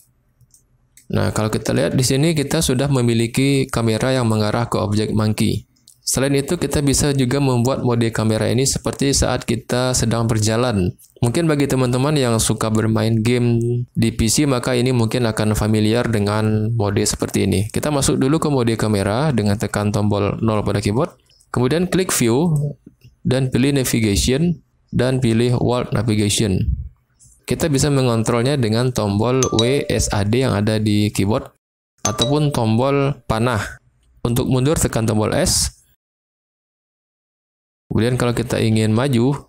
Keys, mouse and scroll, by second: 0.5-0.9 middle drag, 3.3 click, 20.4 KP_0, 22.4-39.4 drag, 35.5-39.4 typing.